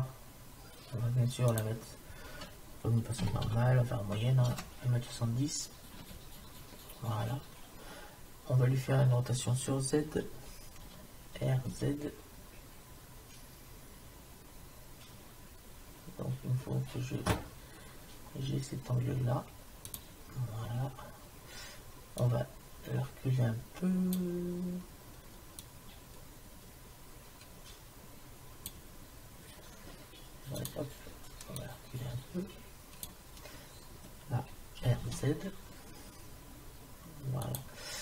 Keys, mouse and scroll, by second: 1.5-3.4 drag, 11.4 r, 20.4 middle click, 22.2-24.0 drag, 25.6-27.5 drag, 30.6-33.4 drag, 34.9 r.